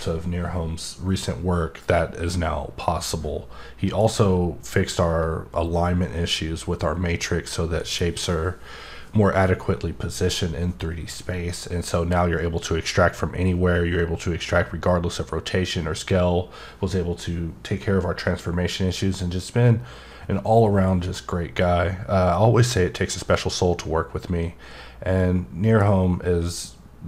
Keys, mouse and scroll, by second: 2.3-4.1 middle drag, 25.2 middle click, 25.5 middle click, 26.4 middle click.